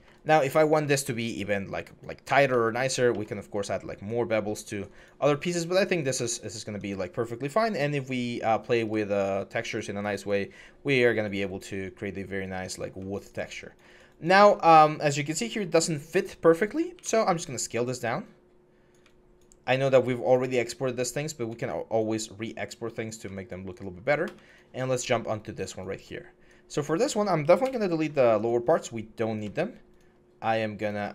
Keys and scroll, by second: 27.4 alt+BackSpace.